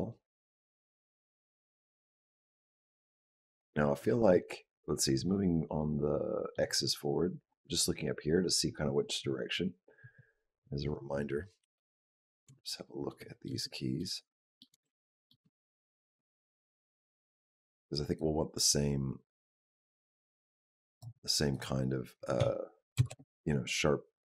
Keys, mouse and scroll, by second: 5.5 middle click, 9.9 click, 11.4 KP_Decimal, 12.9 shift+middle click, 13.8 ctrl+middle click, 13.8 ctrl+scroll down 1, 14.1 shift+middle click, 14.7 ctrl+middle click, 15.3 shift+middle click, 16.0 ctrl+middle click, 16.6 shift+middle click, 18.1 click, 21.4 click, 22.2 s.